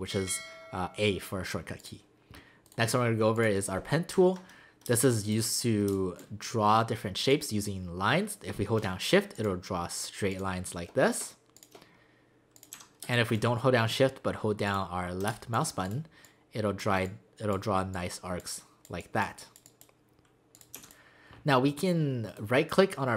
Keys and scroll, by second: 4.9 space, 5.9 space, 12.8 v, 13.0 space, 15.3 space, 20.5 space, 20.8 v.